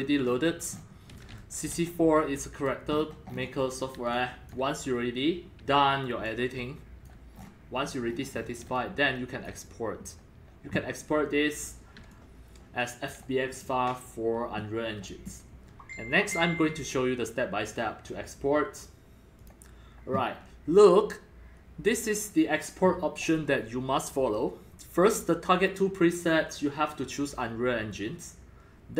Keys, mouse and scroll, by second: 0.8 click, 0.8 click, 0.9-2.2 typing, 1.4 click, 1.9 click, 3.0-3.3 scroll up 10, 3.3-3.7 scroll down 14, 4.0 c, 4.1-4.5 drag, 4.5 c, 5.0-6.2 drag, 6.2 x, 6.2 click, 6.5 c, 7.3-8.7 scroll down 19, 8.4-9.6 typing, 8.7-9.4 drag, 9.5-12.0 drag, 12.0 c, 12.1-13.2 drag, 12.6 c, 12.6-13.3 c, 13.4-18.1 drag, 18.2 click, 19.4 click, 22.9-24.5 drag.